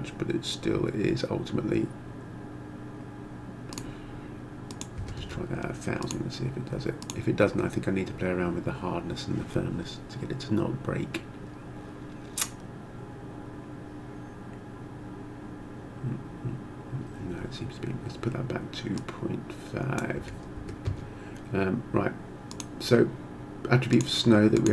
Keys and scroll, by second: 5.0 0, 5.3 Return, 20.2 ., 20.6 5, 20.8 Return.